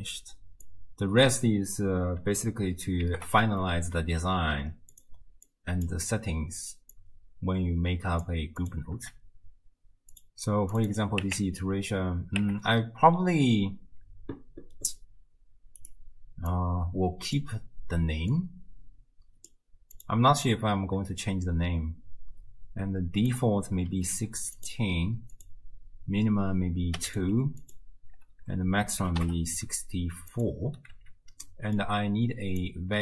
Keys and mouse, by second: 0.7-1.4 drag, 3.1 ctrl+g, 3.7 click, 5.5 click, 6.9 click, 7.2 click, 8.6 click, 10.2 click, 10.8-15.8 drag, 18.3 click, 23.4-24.6 drag, 25.3-27.1 drag, 27.6-30.3 drag, 31.5 click, 32.6 click.